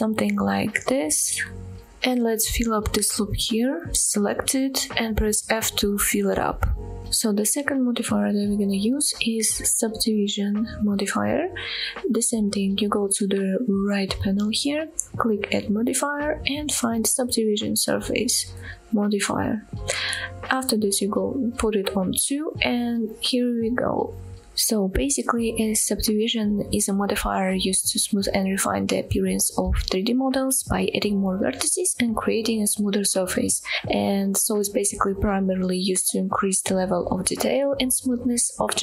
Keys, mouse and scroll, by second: 0.0 middle click, 1.2 scroll down 2, 1.5-2.6 middle drag, 2.8-3.1 scroll up 2, 3.3 shift+middle click, 3.8 shift+middle click, 5.1 f, 5.7 middle click, 7.1 middle click, 7.2 Tab, 7.2-7.6 scroll down 2, 7.9 shift+middle drag, 15.6-19.8 drag, 22.0 click, 22.4-22.9 scroll up 3, 23.0-23.7 middle drag, 24.1-24.5 shift+middle drag, 24.7-25.1 scroll down 1, 25.1 middle click.